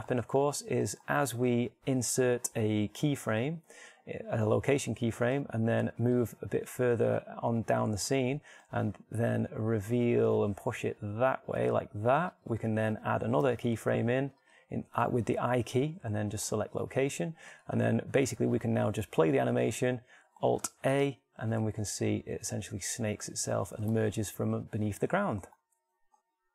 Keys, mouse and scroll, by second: 1.0 shift+right click, 4.1 i, 7.3-9.0 drag, 9.8 g, 13.2-15.0 drag, 14.4 i, 18.2-20.8 drag, 21.9 alt+a, 25.3 alt+a.